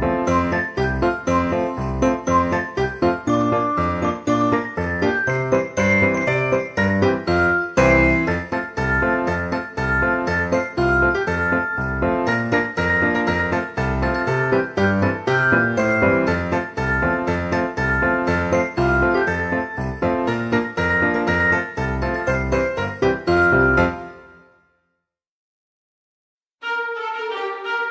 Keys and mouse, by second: 0.1 click, 0.3 shift+d, 0.9 y, 1.1 click, 1.8 middle click, 2.6 shift+middle click, 3.3 middle click, 3.7 middle click, 4.0 ctrl+s, 4.3 F6, 5.0 shift+middle click, 6.3 middle click, 7.0 alt+z, 7.4 click, 8.2 click, 8.7 KP_1, 9.4 g, 11.7 click, 12.0 shift+middle click, 13.0 alt+z, 13.4 g, 14.0 click, 14.2 middle click, 14.6 ctrl+z, 14.9 g, 15.1 x, 15.4 click, 15.6 middle click, 16.2 g, 16.3 x, 17.9 click, 18.2 g, 18.2 x, 19.3 click, 19.7 KP_3, 20.1 KP_1, 20.7 Tab, 21.7 alt+z, 22.0 e, 22.7 click, 24.1 click, 25.5 click, 26.3 middle click, 26.4 alt+z, 26.7 middle click, 27.8 z.